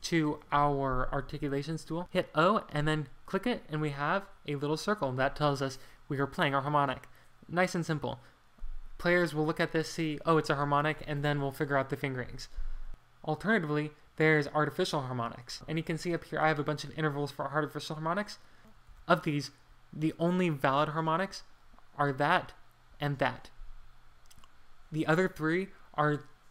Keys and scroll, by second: 2.1-2.8 typing, 4.2 Escape, 15.5 BackSpace, 18.9 ctrl+d, 20.7-22.3 typing, 24.9 Escape.